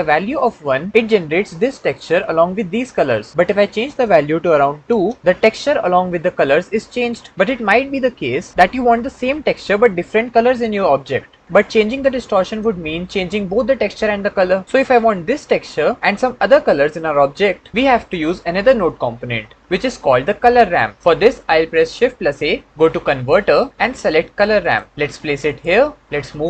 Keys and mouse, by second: 3.6-4.8 drag, 21.9 shift+a, 26.3 click.